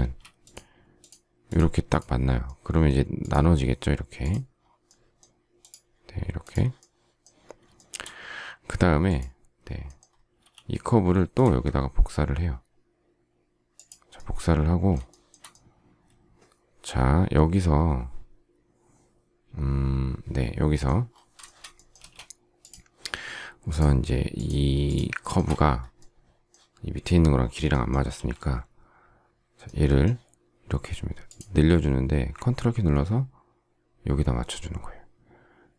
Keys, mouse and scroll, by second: 7.7 shift+middle click, 10.3 m, 15.0 shift+middle click, 21.4 shift+middle click, 21.9 space, 23.6 shift+click, 24.3 shift+click, 24.8 shift+click, 24.9 shift+double click, 25.2 shift+middle click, 28.0 s.